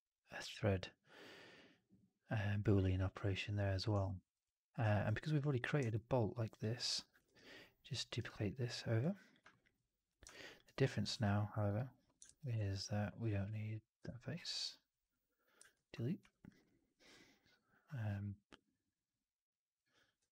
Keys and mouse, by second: 3.9 alt+middle drag, 5.8 alt+middle drag, 6.4 click, 7.5 ctrl+d, 9.4 alt+middle drag, 10.2 alt+click, 10.5 alt+right drag, 10.8 alt+drag, 11.2 3, 12.1 shift+x, 12.5 alt+click, 13.9 Delete, 15.7 shift+x, 16.3 2, 16.5-18.6 drag.